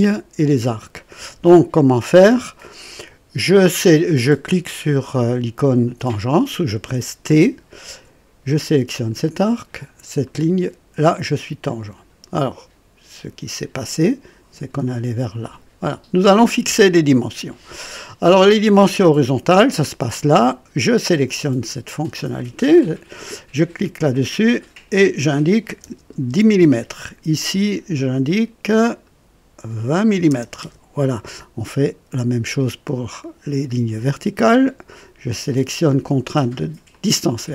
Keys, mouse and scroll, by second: 7.3 typing, 8.9 click, 10.2 click, 11.7 right click, 13.9-15.6 drag, 21.2 click, 24.3 click, 25.6 KP_1, 25.8 KP_0, 26.2 Return, 26.5 Return, 28.9 click, 30.1 KP_2, 30.3 KP_0, 30.6 Return, 30.8 KP_Enter, 31.7 typing, 36.9 click.